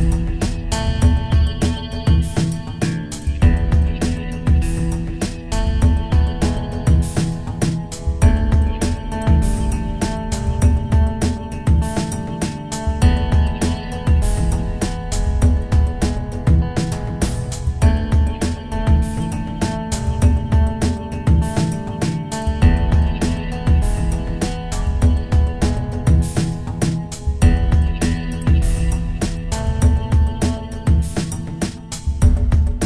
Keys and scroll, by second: 1.8 ctrl+alt+shift+e.